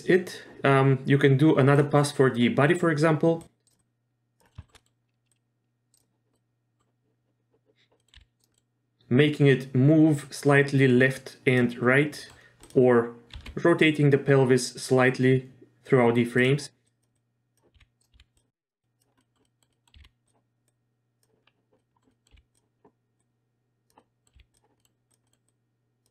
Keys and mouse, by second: 1.7 click, 3.4 drag, 3.8-4.4 drag, 4.5 middle drag, 4.6 shift+middle click, 4.8 middle click, 5.3-6.0 drag, 6.3-6.8 middle drag, 8.0 middle click, 8.2 r, 8.5 middle click, 10.2-11.6 drag, 12.2 middle click, 12.6 click, 13.4 r, 16.9 click, 17.1-17.6 drag, 17.7 r, 18.1 r, 18.8 click, 19.2 middle drag, 19.4 middle click, 19.7 middle click, 19.9 r, 20.7-21.2 drag, 21.8 middle drag, 22.1 middle drag, 22.3 r, 23.2-23.9 drag, 24.0 middle click, 24.3 r, 24.8 middle drag, 25.2 middle click, 25.4-26.1 drag.